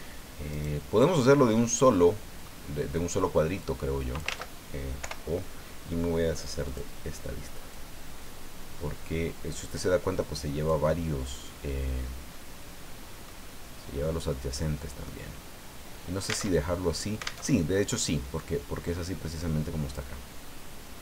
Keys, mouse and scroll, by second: 0.5 right click, 1.2-2.6 middle drag, 3.6 click, 4.3 ctrl+z, 5.0 o, 6.6 click, 7.7-13.4 drag, 10.9-13.4 middle drag, 14.2-15.2 middle drag, 16.5 alt+Tab, 17.4 alt+Tab, 18.3-20.1 drag, 20.2 scroll down 2, 20.4-21.0 drag.